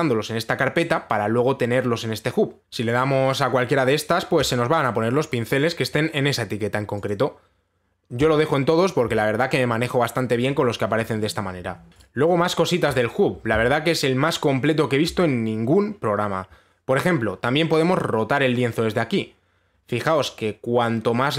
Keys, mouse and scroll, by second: 5.0 click, 7.7 click, 8.8 click, 12.6 right click, 13.5 right click.